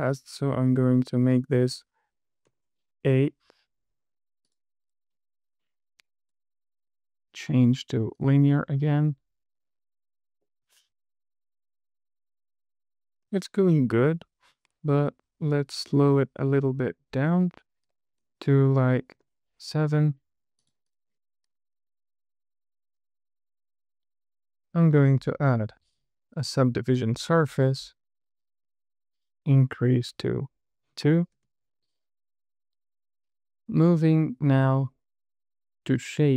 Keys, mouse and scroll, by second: 0.2 click, 1.3-3.0 drag, 5.2 click, 5.9 click, 7.1-8.6 right drag, 8.9 space, 13.5 space, 16.4 click, 17.7-19.7 drag, 20.9 click, 21.2 click, 22.2 space, 25.3-27.0 drag, 28.0 space, 30.6 click, 31.7 space.